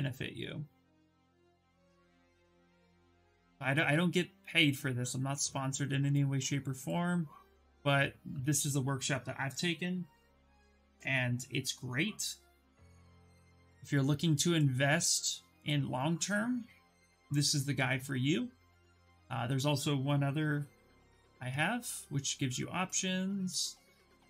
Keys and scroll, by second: 10.2 ctrl+v, 10.6 Return.